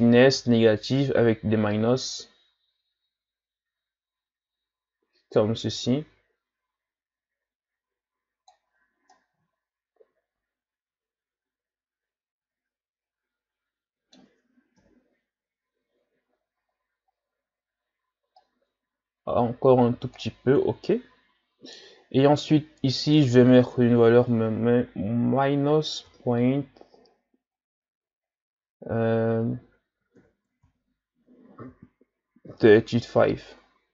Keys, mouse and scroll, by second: 0.0-3.0 drag, 9.1-12.1 middle drag, 14.8 KP_1, 17.1-18.3 scroll up 2, 18.3-21.4 shift+drag, 22.0-23.1 scroll up 3, 23.1-26.2 drag.